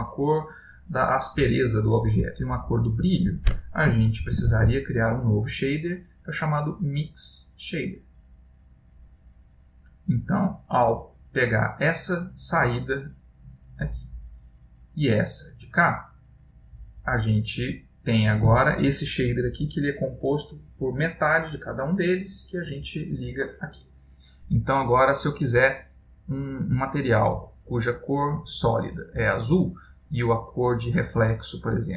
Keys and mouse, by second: 0.8 click, 4.2 shift+a, 9.5 click, 10.9 click, 14.4 click, 15.0 click, 17.6 click, 22.6 click, 26.7 click, 30.9 click.